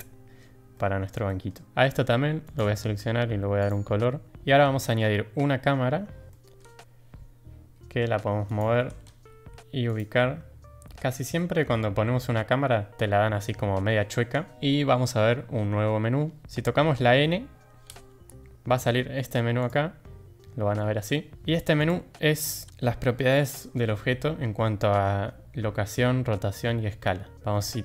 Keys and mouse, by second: 0.7-1.0 middle drag, 1.2 shift+middle drag, 2.4 click, 3.5 click, 4.6 shift+a, 6.3 drag, 7.6 g, 8.7 g, 10.1-10.9 drag, 11.3 drag, 13.4 middle drag, 17.8 n, 19.6 click, 21.7 click.